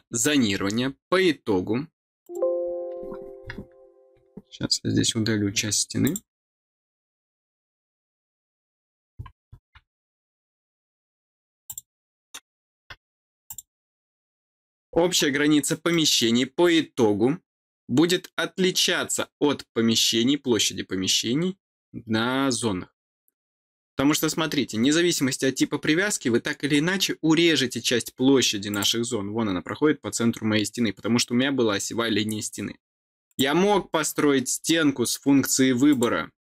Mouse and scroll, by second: 0.2 middle click, 0.2-2.1 scroll down 4, 0.7 middle click, 2.1 click, 5.9 click, 10.3-11.2 scroll down 2, 11.6 click, 13.4 click, 14.3 scroll down 2, 14.8 scroll down 2, 15.2 scroll up 2, 15.8 middle click, 24.3-24.7 scroll up 4, 24.9 scroll down 2, 25.9-26.3 scroll down 2, 26.6 scroll up 2, 28.1 scroll up 2, 28.6 click, 32.6 scroll down 2, 33.2 click, 35.8 click, 36.3 click.